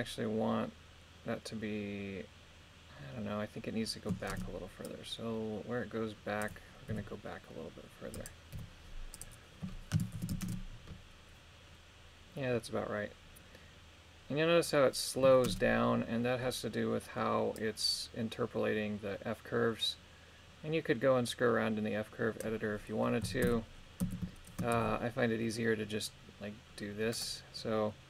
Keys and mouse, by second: 4.4 shift+space, 4.9-6.5 drag, 6.9 r, 8.1 click, 8.5 i, 10.2 shift+Left, 10.4 shift+space, 15.5 shift+space, 17.6-22.5 drag, 23.2 a, 23.4 a, 24.0 a, 24.7 shift+d.